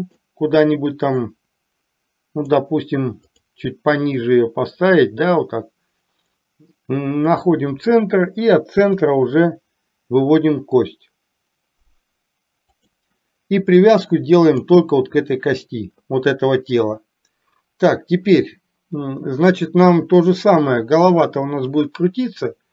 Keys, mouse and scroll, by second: 1.2-2.6 drag, 3.3 click, 4.3-6.5 drag, 7.2 click, 9.1 e, 14.6 click.